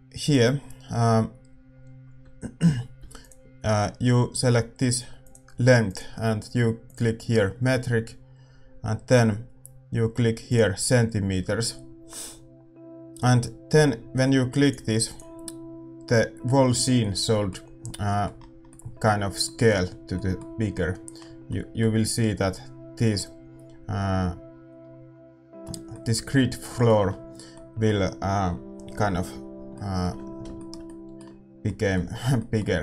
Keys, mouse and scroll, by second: 3.1-16.9 drag, 3.1 a, 16.9-32.8 middle drag.